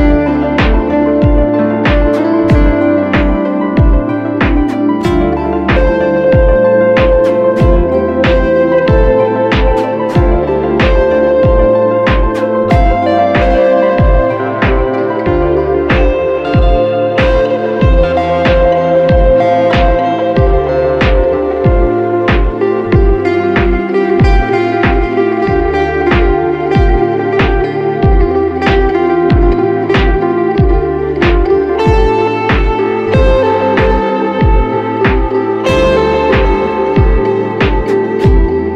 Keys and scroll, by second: 33.0 super+v, 37.3 v.